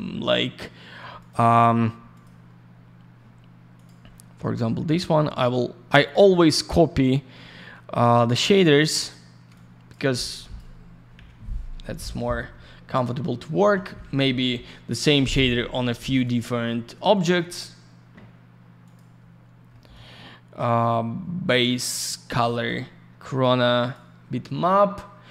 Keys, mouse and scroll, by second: 1.2 click, 1.3 click, 2.1 click, 2.2 click, 3.7 click, 3.8 click, 4.9 middle click, 5.1 middle click, 6.0 click, 6.1 click, 6.2 click, 6.3 click, 7.0 scroll down 1, 8.5-9.0 scroll up 1, 9.0 click, 9.1 click, 9.5 shift+click, 10.3 click, 11.1 Delete, 11.8 click, 12.0 click, 12.5 F5, 14.3 click, 14.4 click, 14.9 click, 15.0 click, 15.4 F4, 16.2 click, 16.2 click, 16.3 click, 16.4 click, 17.1 click, 17.3 click, 18.8 click, 18.9 click, 19.3 scroll up 1, 19.7 middle click, 20.7 click, 21.8 click, 22.0 click, 22.6 click, 23.8 click, 23.9 click.